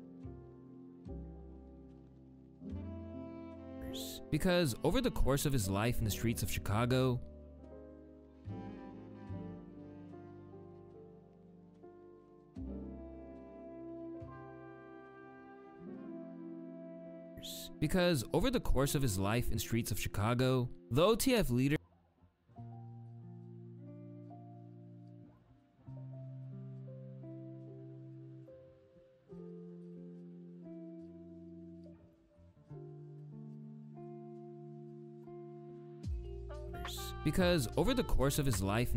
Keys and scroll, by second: 9.2 space, 9.2 p, 9.9 p, 17.0 space, 36.4 space.